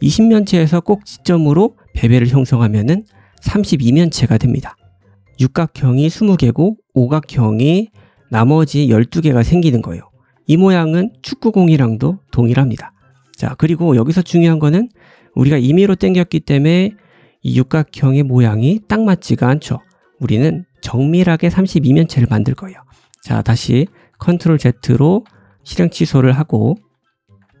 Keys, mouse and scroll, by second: 5.1 3, 5.3 click, 5.4-6.5 middle drag, 6.5 click, 6.5-8.2 middle drag, 8.2 click, 8.3 middle click, 8.5 click, 8.6-13.0 middle drag, 10.3 Tab, 13.0 click, 13.1-17.2 middle drag, 14.7 Tab, 16.5-17.2 scroll up 2, 17.2 click, 17.3-27.6 middle drag, 23.1 ctrl+z, 23.4 ctrl+z, 24.1 ctrl+z, 24.4 ctrl+z, 24.9 ctrl+z, 25.1 ctrl+z, 25.4 ctrl+z, 25.6 ctrl+z, 25.7 ctrl+z, 26.2 ctrl+z, 26.4 ctrl+z, 27.0 ctrl+z.